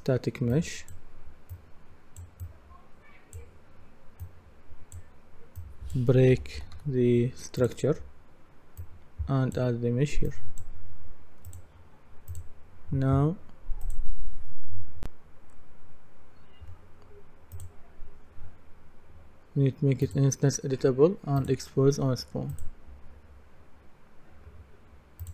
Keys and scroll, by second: 6.1-7.3 typing.